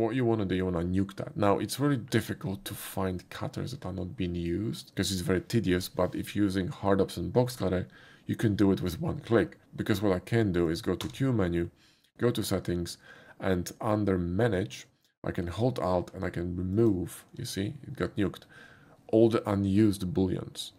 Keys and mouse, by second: 10.7 click, 11.3 q, 16.8 click.